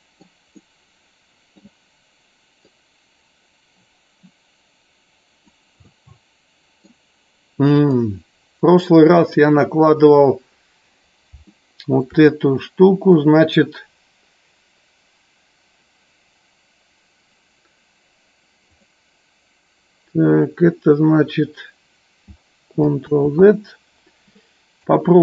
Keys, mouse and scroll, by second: 0.7 middle click, 2.7-5.6 drag, 5.8 scroll up 1, 6.0 middle click, 11.5-12.2 shift+middle drag, 12.4 middle click, 18.7 click, 23.2 ctrl+z, 24.8 click.